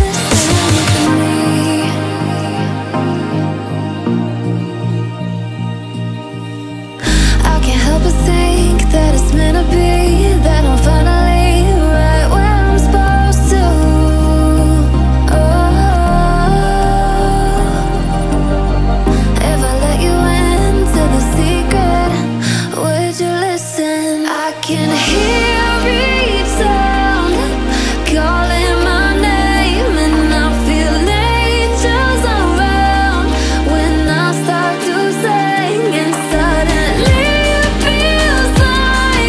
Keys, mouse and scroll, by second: 0.5 7, 1.5 click, 2.1-2.5 alt+scroll down 1, 2.6 click, 2.9 alt+scroll up 1, 4.1-10.0 alt+drag, 10.0 alt+scroll down 1, 10.6 click, 11.5 alt+scroll up 1, 12.0 click, 12.8 Down, 13.5 alt+scroll down 1, 14.7 click, 15.6-15.9 alt+scroll up 1, 16.9-17.3 alt+scroll down 1, 17.4 alt+scroll up 1, 18.3-18.8 alt+scroll down 1, 18.8-19.4 alt+scroll up 1, 20.2 shift+click, 21.7 ctrl+z, 22.7 click, 24.8 click, 26.2 ctrl+z, 27.2 ctrl+shift+z, 27.6 click, 28.7-29.1 alt+scroll up 1, 29.1 alt+scroll down 1, 29.5-29.9 alt+scroll up 1, 31.0-36.6 drag.